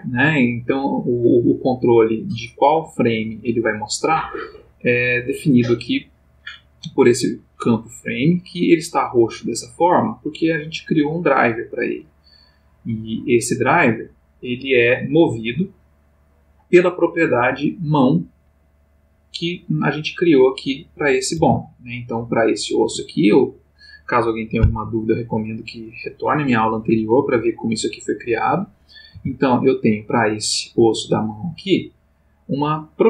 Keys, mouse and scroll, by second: 1.6-3.2 drag, 2.8 Escape, 9.9 right click, 13.2 click, 18.7 click, 20.2 click, 21.3 r, 22.8 Escape, 29.1 r, 30.7 Escape, 32.0 click.